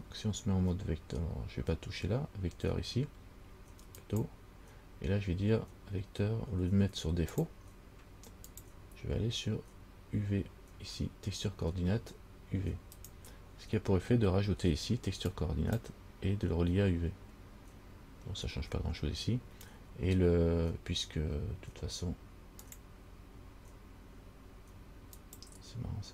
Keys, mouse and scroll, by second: 4.2 click, 7.6 click, 8.7 click, 15.5 click, 22.8 click.